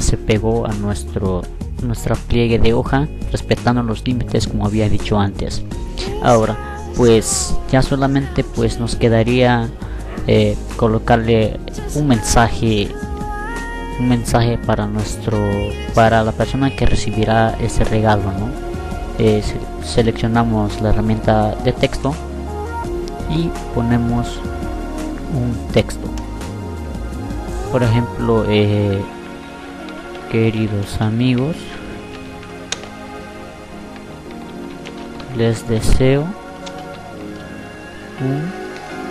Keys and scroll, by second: 27.7-31.0 typing, 32.8-35.9 typing.